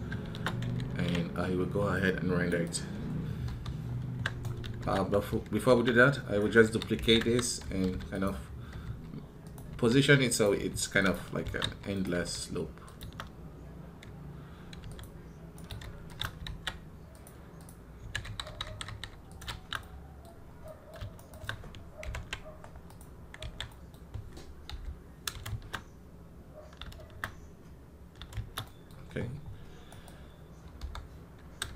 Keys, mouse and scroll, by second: 19.3 shift+z, 19.6-21.0 middle drag, 21.0 shift+right click, 22.8 ctrl+l, 29.7 right click.